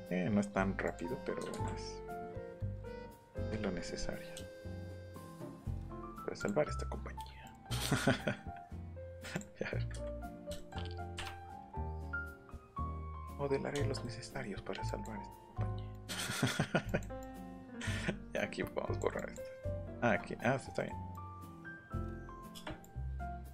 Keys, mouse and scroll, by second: 0.8 click, 2.1 click, 3.4 Escape, 6.4 click, 8.7 click, 9.1 Escape, 9.3 click, 10.3 click, 11.2 Up, 11.7 click, 12.3 click, 12.9 click, 13.5 scroll up 1, 13.9 middle click, 14.9 click, 15.9 click, 16.9 click, 17.2 click, 17.7-19.0 drag, 19.2 click, 19.9 ctrl+z, 20.8 middle click, 21.1 click, 21.7 click, 22.8 click.